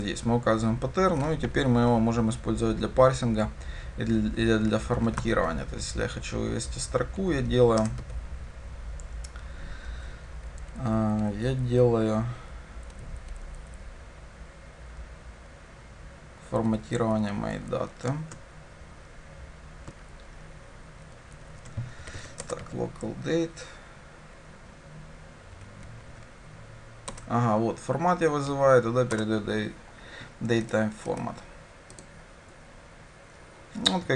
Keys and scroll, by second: 5.3 Tab, 7.8 Return, 22.4 Return, 27.2 Return, 32.2 ctrl+shift+F10.